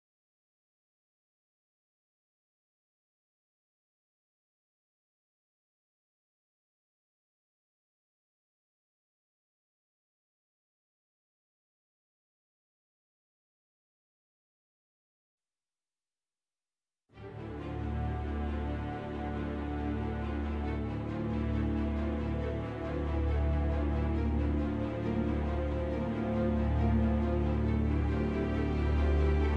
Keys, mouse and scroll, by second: 0.7 c, 1.7 shift+right click, 1.8 scroll up 1, 2.5 scroll up 1, 2.8 alt+s, 3.9 shift+click, 4.0-4.6 scroll down 3, 4.2 shift+middle click, 4.6 c, 4.9 middle click, 5.1 right click, 5.2 scroll up 2, 5.4 ctrl+z, 7.0 scroll down 1, 7.1 c, 7.8 shift+right click, 7.9-8.7 scroll up 1, 8.7 alt+s, 9.8 shift+click, 9.9 scroll down 1, 10.2-12.2 middle drag, 11.0-11.4 scroll down 1, 11.4 click, 12.2 scroll up 1, 12.4-14.3 middle drag, 12.5-12.9 scroll down 2, 12.9 c, 14.3 right click, 14.3 scroll up 1, 14.7-17.4 shift+middle drag, 15.1-15.4 scroll up 1, 15.4 alt+s, 17.4 shift+click, 17.5 Tab, 17.8 z, 18.0 scroll down 2, 18.1-22.7 middle drag, 18.5-18.8 scroll up 2, 19.6-20.2 scroll down 2, 20.5 `, 20.7-21.2 scroll down 3, 21.2-21.5 scroll up 2, 21.5 shift+a, 22.3-22.7 scroll down 2, 22.7 Tab, 23.2 click, 23.4 g, 25.0 click, 25.6 g, 26.5 click, 26.8 click, 27.0 g, 27.9 click, 28.1 click, 28.3 g, 29.2 click, 29.3 z.